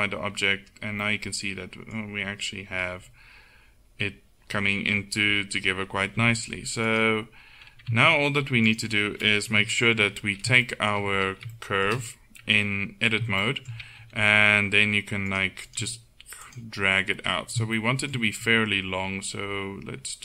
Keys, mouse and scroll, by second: 1.1 middle click, 1.3 middle click, 6.2 z, 8.0 Tab, 9.6 KP_1, 14.1 g, 15.9 g, 18.5 g.